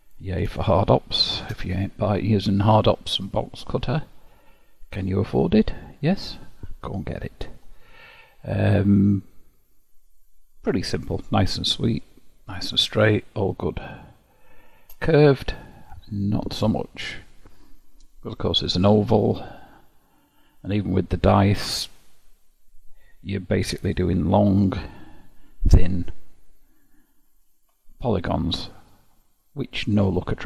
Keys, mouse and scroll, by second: 0.8-4.8 shift+middle drag, 8.1-9.1 scroll up 2, 9.1 click, 11.4-15.5 middle drag, 15.5-17.1 scroll down 3, 17.1-18.5 scroll up 2, 18.5-20.7 scroll down 1, 20.7-21.1 scroll down 1, 27.2 alt+v, 29.1-30.4 middle drag.